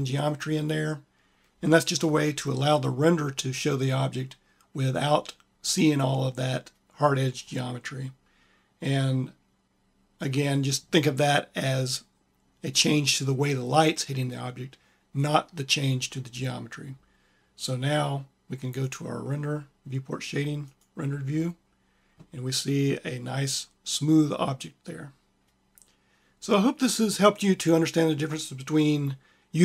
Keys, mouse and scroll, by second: 23.5 click.